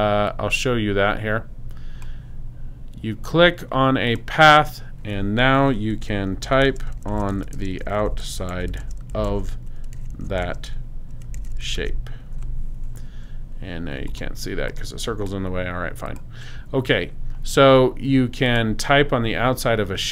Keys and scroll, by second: 5.9-12.3 typing.